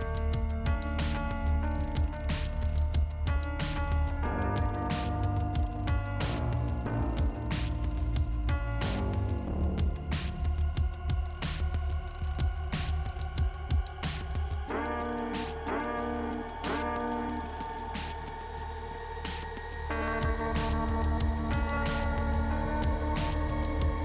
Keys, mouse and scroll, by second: 4.4 click, 5.3 middle click, 7.0 click, 11.6 click, 13.4 middle click, 14.7 click, 18.8 click, 21.4 click, 23.9 click.